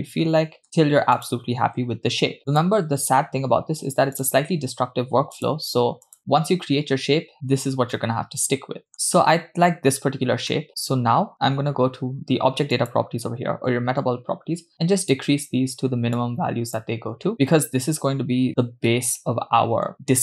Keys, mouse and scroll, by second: 0.8 g, 1.8 s, 4.2 click, 5.4 click, 6.1 click, 8.0-8.9 middle drag, 10.5 middle click, 12.8 click, 14.8 click, 16.2-17.3 drag, 18.9-19.9 middle drag.